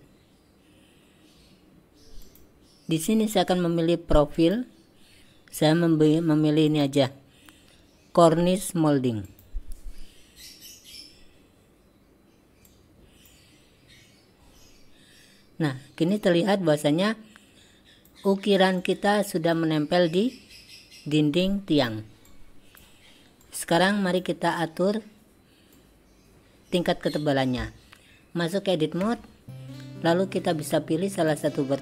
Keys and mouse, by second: 2.3 click, 4.4 click, 6.8-9.5 drag, 12.7-13.3 drag, 16.2-18.1 drag, 18.8 click, 21.6 click, 22.3 click, 23.5 click, 25.8-26.8 drag, 29.1 Tab, 31.4 click.